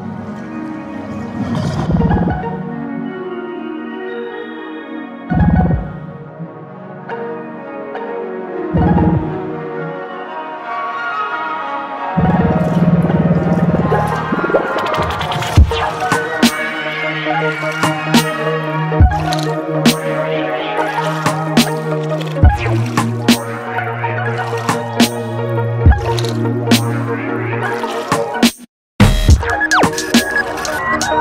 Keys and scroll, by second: 6.6 ctrl+t, 10.4 Return, 13.6 ctrl+t, 14.8 ctrl+t, 20.7 Return.